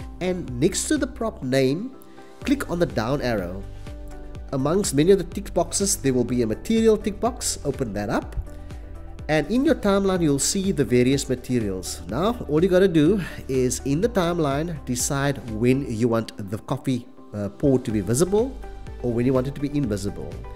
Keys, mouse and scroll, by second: 2.3 click, 3.4 click, 6.6 click, 8.9 click, 17.9 click, 19.4 click.